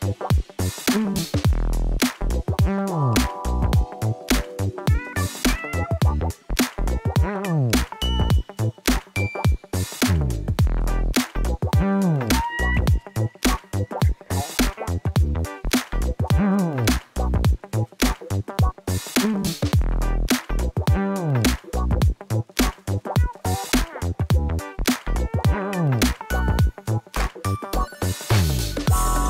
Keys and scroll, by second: 3.2 shift+d, 3.4 x, 7.0 g, 7.3 x, 27.1 Left, 27.6 ctrl+shift+Left, 28.4-29.2 typing.